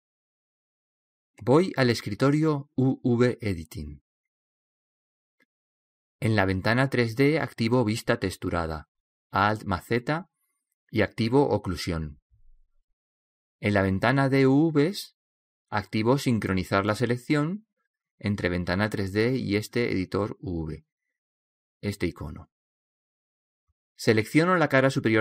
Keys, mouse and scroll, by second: 2.2-4.1 drag, 10.6 alt+z, 22.8-24.1 drag.